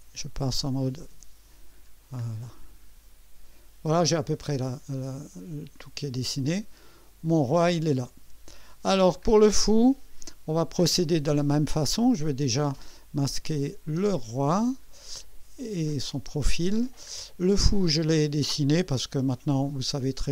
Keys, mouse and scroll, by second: 1.9 scroll down 1, 2.4-8.6 drag, 9.3 scroll down 1, 9.8 right click, 11.9 scroll up 1, 13.6 click, 14.0 space, 14.5 scroll up 3, 15.7 click, 16.2 space, 16.8-17.1 scroll down 2, 17.9 scroll down 2.